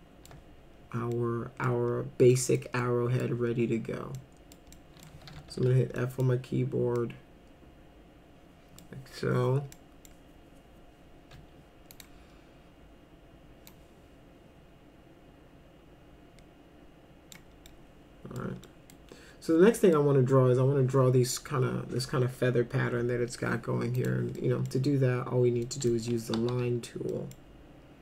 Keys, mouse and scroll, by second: 1.1 middle click, 2.3 middle click, 2.8-3.2 middle drag, 4.1 middle click, 4.8 middle click, 5.3 f, 5.6 z, 6.0 middle click, 7.0-8.8 middle drag, 9.7 middle click, 11.9 click, 13.7-17.4 drag, 17.7 middle click, 18.7 middle click, 19.8 middle click, 24.0 click, 24.4 middle click, 25.7 middle click, 26.4 4, 27.1 middle click.